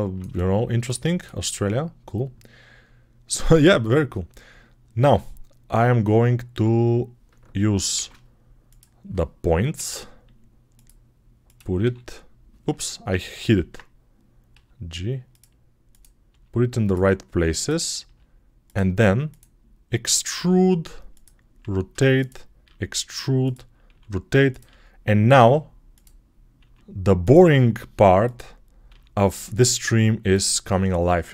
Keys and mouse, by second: 0.0 alt+shift+middle click, 0.6 ctrl+alt+shift+middle click, 4.9 Tab, 6.3 Tab, 7.8 shift+2, 9.6 g, 10.0-15.7 middle drag, 11.6 h, 13.2 ctrl+z, 14.4 g, 15.7 click, 15.8-31.1 middle drag, 16.1 g, 17.9 g, 20.2 e, 21.4 r, 22.5 e, 23.7 r, 24.5 e, 26.5 r, 27.7 s, 28.7 e, 31.1 click, 31.2-31.3 middle drag.